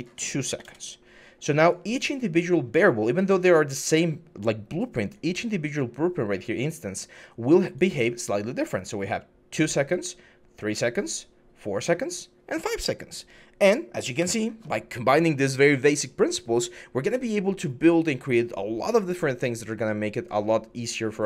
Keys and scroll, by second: 0.3 2, 0.4 Return, 1.4 typing, 14.0 Escape.